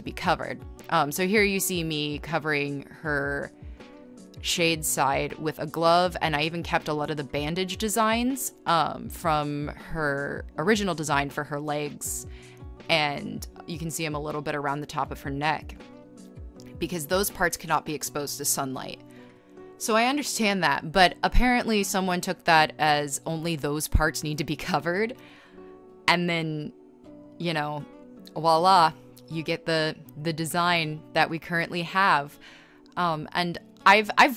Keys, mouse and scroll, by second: 1.3 space, 1.6 space, 2.4 space, 6.3 ctrl+z, 6.5 ctrl+z, 7.5 scroll, 9.6 space, 10.1 e, 10.7 ctrl+z, 10.9 b, 14.9 e, 15.3 ctrl+z, 16.5 scroll, 17.2-17.6 scroll, 17.5 space, 22.4 scroll, 23.6 scroll, 24.0 ctrl+z, 24.2 scroll, 26.0 b, 26.6 ctrl+z, 27.0-27.9 typing, 28.9 r, 32.0 scroll, 32.1 ctrl+z, 33.2 scroll, 33.4 ctrl+z, 34.2 scroll.